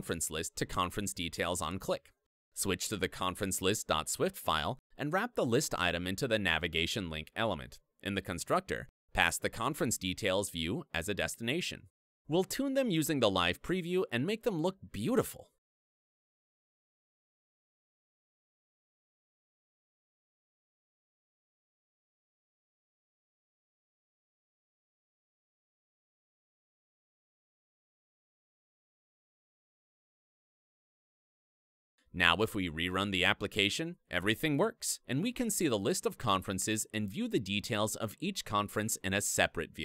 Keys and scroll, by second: 0.8 alt+Up, 2.4 alt+super+t, 13.5 super+e, 15.9 Return, 24.1 Return, 28.9 Return, 30.1 super+s, 31.8 ctrl+r.